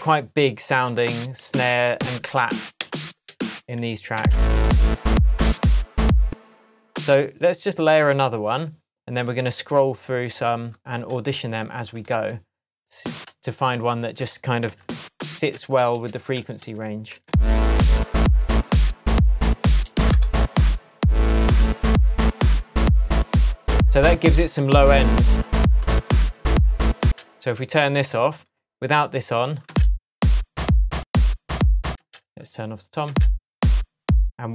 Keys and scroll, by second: 1.3 Down, 6.2 space, 15.9 alt+Left, 16.6 shift+Tab, 17.2 shift+space, 18.2 space, 19.8 Up, 27.0 space, 29.6 space, 31.9 space, 33.0 space.